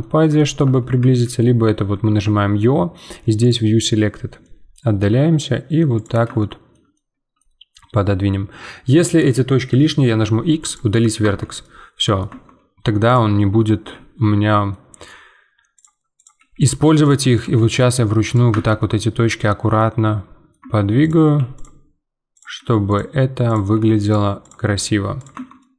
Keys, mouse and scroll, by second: 0.0-1.0 middle drag, 1.0 q, 2.0 `, 3.9-4.4 scroll down 1, 4.4 middle click, 4.9 g, 6.4-9.9 shift+middle drag, 11.2 Tab, 16.4 g, 17.3 click, 17.5 g, 18.5 Tab, 18.8-20.6 middle drag, 20.6 Tab, 21.0 click, 21.2 g.